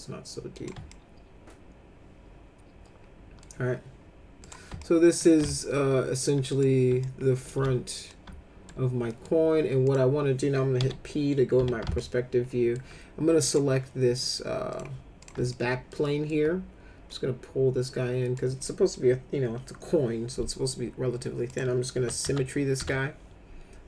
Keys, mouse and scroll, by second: 0.6 click, 0.9-3.4 alt+middle drag, 4.4 click, 4.8 alt+middle click, 5.5 alt+middle click, 6.5 click, 7.0 alt+middle click, 7.5 z, 8.1 alt+middle click, 9.1 middle click, 9.8 click, 10.8 p, 11.6 z, 11.9 alt+middle click, 13.4 click, 14.7 click, 15.2 click, 15.5 alt+middle click, 16.0 alt+middle click, 17.1-18.3 drag, 18.6 middle click, 21.5 click, 21.9 s, 22.3 s, 22.8 s.